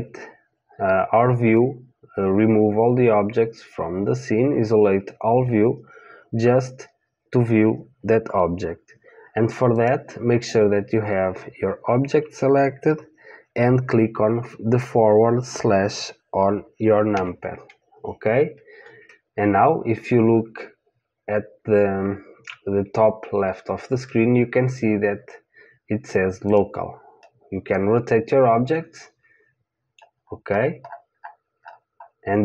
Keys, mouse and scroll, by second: 9.7-17.1 drag, 17.1 KP_Divide, 26.5 click, 27.2-29.2 middle drag, 30.2-30.9 scroll up 1, 30.9-32.4 middle drag.